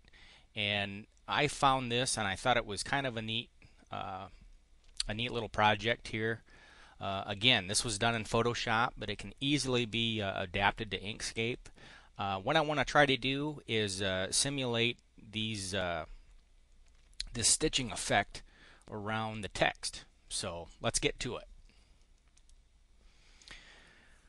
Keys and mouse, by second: 22.3 click, 23.3 click.